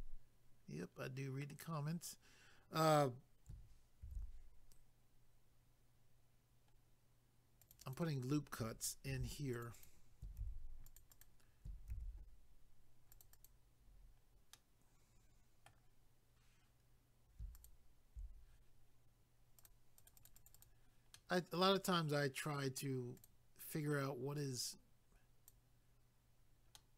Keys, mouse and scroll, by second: 5.9-6.7 scroll up 1, 6.7 scroll down 1, 7.4 scroll down 1, 7.6 click, 7.7 click, 7.8 click, 9.1 ctrl+r, 9.5 click, 9.6 click, 9.7 click, 9.9 double click, 10.9 click, 11.0 click, 11.1 click, 11.2 double click, 11.9 ctrl+r, 12.6-13.1 scroll up 1, 13.1 click, 13.2 click, 13.3 click, 13.5 double click, 14.5 middle click, 17.5 alt+click, 17.6 alt+click, 19.6 click, 19.6 click, 19.9 click, 20.1 click, 20.1 click, 20.3 double click, 20.3 click, 20.5 click, 20.6 double click, 21.1 middle click, 23.2 click, 23.2 click, 24.4 click, 26.8 middle click.